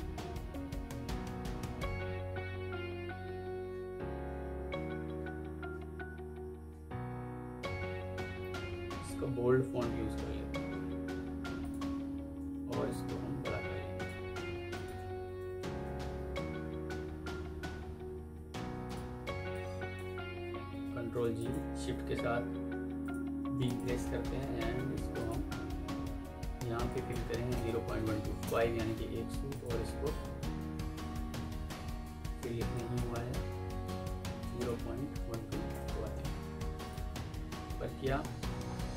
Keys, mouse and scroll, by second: 0.7 Down, 2.2 Down, 2.4 Down, 4.5 Down, 5.2 Down, 5.4 Down, 14.6 shift+click, 15.1 typing, 15.7 Escape, 18.1 F3, 19.4 alt+click, 20.6 ctrl+g, 21.2 shift+click, 21.8 typing, 22.6 Escape, 23.5 shift+click, 23.9-24.2 typing, 24.2 Escape, 25.6 Escape, 27.4 Insert, 27.6 Delete, 27.8 End, 28.0 Down, 28.3 Return, 30.1 Up, 31.2 ctrl+z, 31.5 Escape, 34.3-35.4 typing, 35.6 Return, 37.4 Up, 38.1-38.8 alt+scroll up 1.